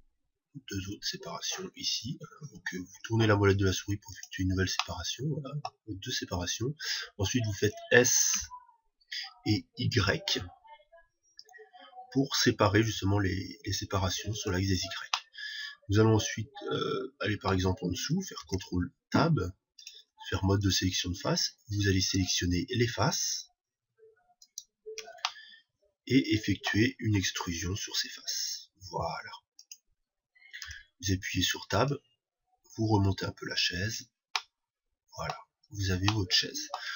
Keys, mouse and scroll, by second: 0.1 ctrl+r, 4.7-6.6 drag, 5.2-7.2 middle drag, 8.7 s, 14.9-16.8 drag, 15.6-17.5 middle drag, 18.9 ctrl+Tab, 21.0-26.7 right drag, 22.0 shift+i, 25.7-27.6 middle drag, 27.7 e, 30.2-32.1 drag, 31.0 Tab, 32.3-34.2 drag, 34.8-36.9 middle drag.